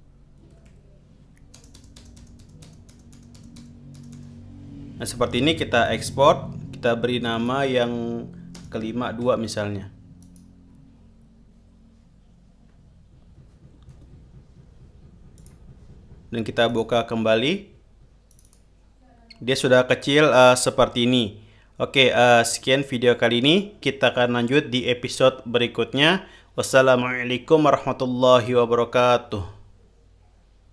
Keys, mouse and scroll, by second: 0.0-1.9 typing, 6.2 click, 7.7 click, 8.9 space, 9.6 KP_2, 10.6 click, 14.3 alt+Tab, 15.7 click, 17.0 click, 18.6 click.